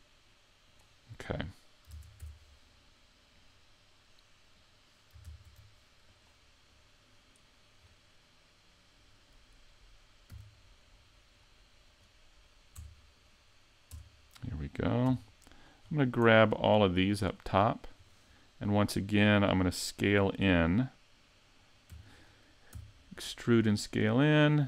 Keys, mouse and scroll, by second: 1.9 ctrl+Tab, 2.7 middle click, 5.3 ctrl+Tab, 6.7 middle click, 7.8-8.3 scroll down 5, 8.3 middle click, 10.3 c, 12.0 right click, 12.8 Tab, 13.2 right click, 13.9 Tab, 15.1 c, 17.5 right click, 18.0 scroll up 4, 18.4 middle click, 22.0 e, 22.2 click, 22.8 s.